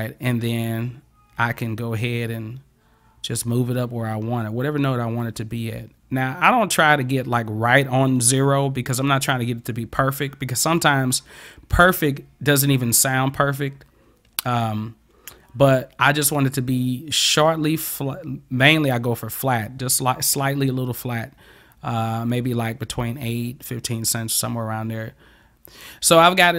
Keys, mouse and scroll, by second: 1.7-25.6 drag.